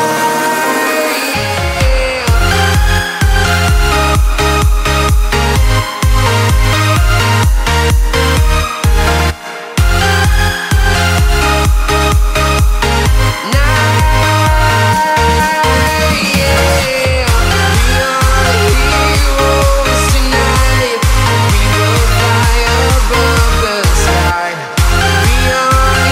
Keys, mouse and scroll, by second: 1.3 right click, 5.1 right click, 13.8 right click, 16.8 right click, 23.0 right click.